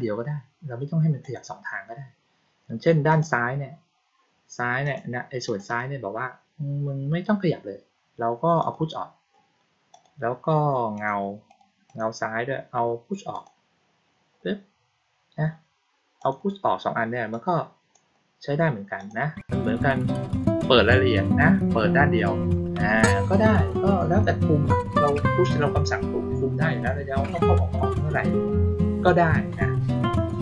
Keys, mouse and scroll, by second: 1.1 click, 3.0 click, 4.8 click, 5.4 click, 5.6 click, 8.5 click, 9.8 click, 10.9 click, 11.4 click, 11.8 click, 13.2 click, 16.1 click, 17.2-17.8 drag, 18.9 click.